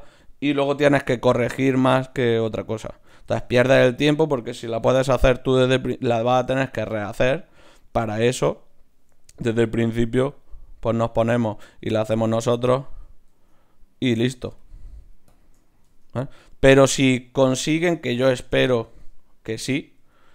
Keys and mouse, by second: 0.9 shift+q, 3.2 ctrl+Tab, 4.1-6.0 drag, 4.8-5.1 f, 5.3 f, 5.6 f, 7.9 ctrl+Tab, 8.6-11.0 drag, 9.8 shift+q, 11.5-12.8 drag, 12.3 Tab, 13.3 Tab, 14.6-17.3 drag, 15.8 Tab, 17.3-18.4 right drag, 20.0 g.